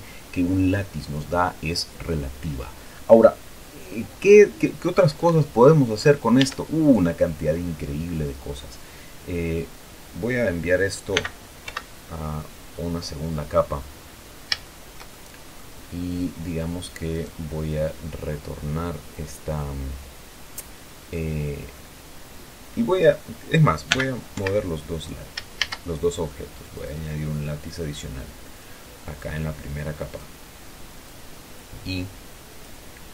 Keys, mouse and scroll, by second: 5.6 Escape, 6.8 Tab, 7.2 right click, 11.5 m, 12.0 2, 13.1 click, 13.7 middle click, 14.2-15.0 scroll up 1, 15.0 shift+middle click, 15.5 shift+scroll up 1, 16.1-17.1 scroll up 2, 17.5 right click, 22.1-23.7 middle drag, 24.3 m, 24.7 2, 25.9 shift+a, 27.1 click, 28.3 click, 29.5-30.7 drag, 31.4-33.1 drag.